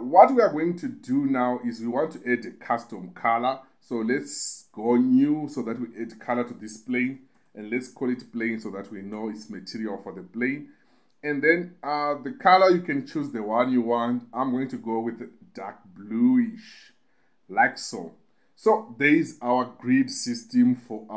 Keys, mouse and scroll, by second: 4.9 click, 6.4 click, 11.7 click, 18.4 click.